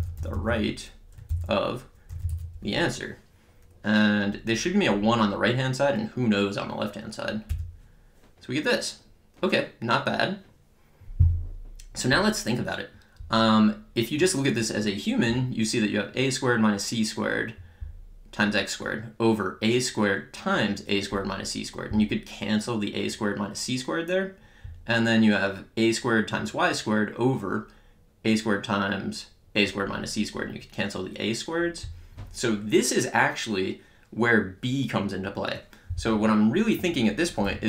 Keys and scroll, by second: 0.0-2.8 typing, 7.4 Return, 37.2-37.6 typing.